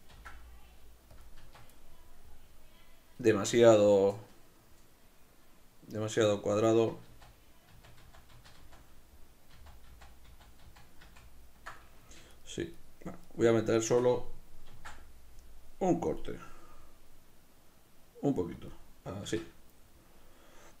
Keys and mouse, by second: 0.1 ctrl+b, 1.2 click, 1.4 Tab, 1.8-12.3 middle drag, 7.1 ctrl+z, 12.3-14.7 right drag, 14.7 ctrl+b, 18.7 click, 19.2 Tab, 19.8-20.8 middle drag.